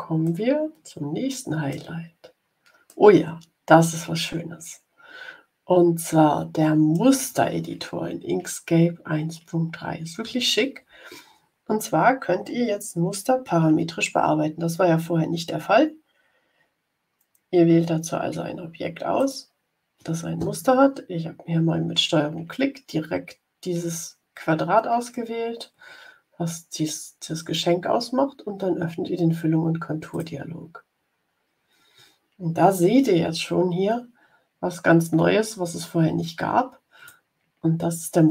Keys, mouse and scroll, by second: 0.2-1.8 middle drag, 2.8-4.7 middle drag, 4.7-7.0 drag, 19.1 ctrl+click, 30.0 click, 34.9-37.2 drag.